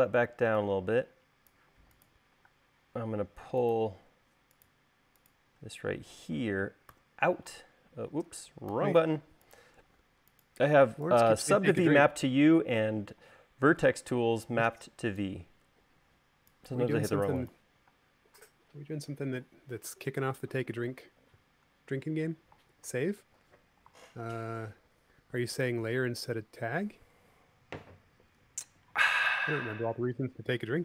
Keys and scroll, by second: 2.7 space, 7.1 u, 8.9 u, 14.0 v, 18.1 space, 23.4 super+s.